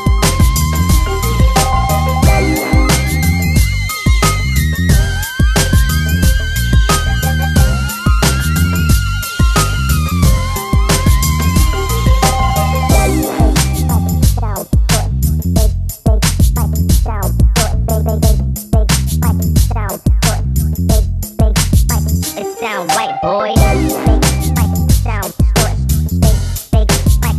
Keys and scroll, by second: 5.8 Escape, 12.0 Escape.